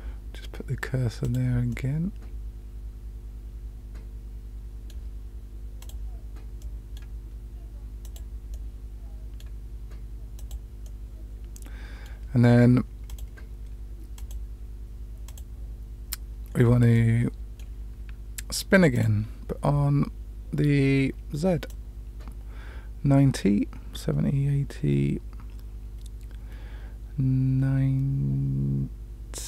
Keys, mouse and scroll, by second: 1.2 click, 1.7-4.9 middle drag, 5.7 click, 6.5 middle click, 8.0 click, 8.5 middle click, 10.3 click, 10.8-12.0 middle drag, 13.0 click, 14.1 click, 15.2 click, 16.9-18.5 middle drag, 18.9 click, 21.7-29.4 drag.